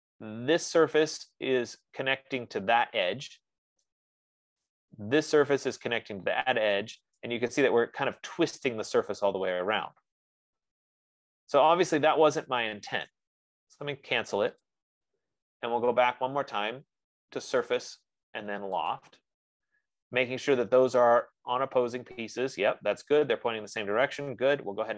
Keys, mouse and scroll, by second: 0.2 right click, 5.1 right click, 7.3-10.1 right drag, 13.4 F15, 13.4 right click, 15.0 click, 18.0 click, 19.5 click.